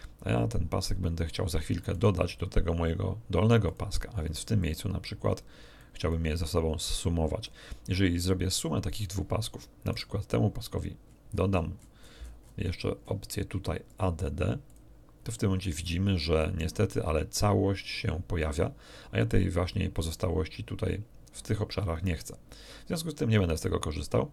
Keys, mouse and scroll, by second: 1.9 right click, 3.6 click, 4.6-6.0 drag, 6.0-7.6 drag, 9.9 right click, 11.0-12.8 scroll up 1, 13.0 scroll up 1, 13.8 click, 14.6 click.